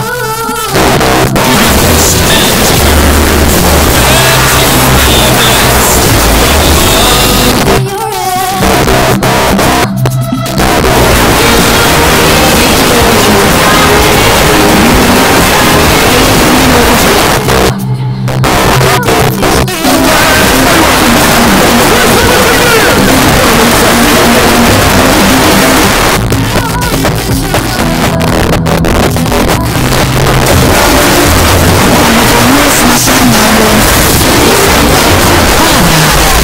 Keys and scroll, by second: 7.5 Page_Down, 17.2 Page_Down, 25.9 Page_Down.